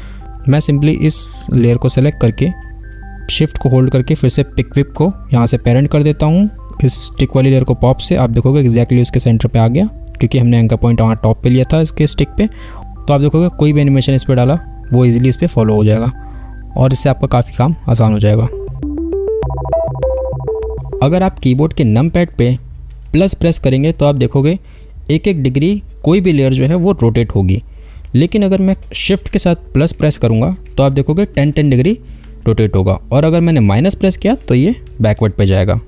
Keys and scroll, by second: 13.4 space, 34.2 shift+-.